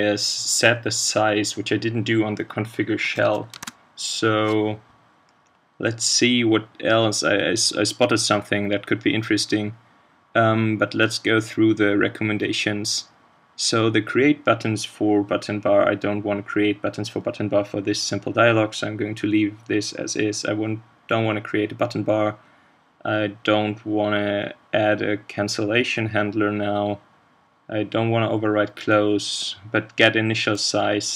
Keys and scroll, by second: 3.5 ctrl+space.